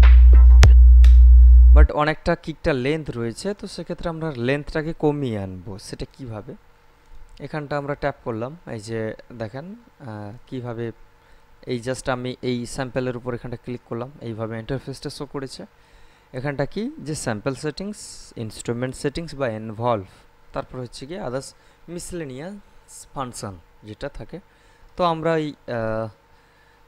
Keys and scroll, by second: 1.0 space.